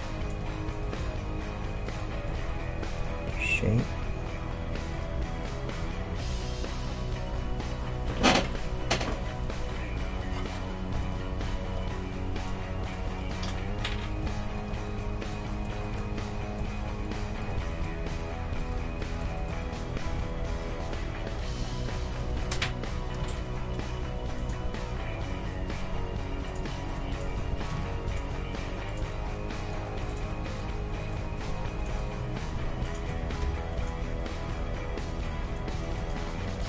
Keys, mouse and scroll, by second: 0.3-5.4 right drag, 1.0 g, 4.1 g, 5.4-7.5 right drag, 6.2 g, 8.5 middle click, 9.4 right click, 9.6 middle click, 10.2-13.0 right drag, 10.7-12.8 middle drag, 11.3 g, 14.2 g, 14.9-17.0 middle drag, 17.0-19.2 right drag, 17.7-21.6 middle drag, 18.0 g, 20.0 g, 21.9 Tab, 22.2 right click, 22.4-24.4 middle drag, 22.9 g, 26.9 middle click, 27.3-29.2 right drag, 27.5 g, 29.8 middle click, 31.5-34.2 right drag, 33.2 g, 33.9 middle click, 35.0-36.6 right drag, 35.2-36.6 middle drag.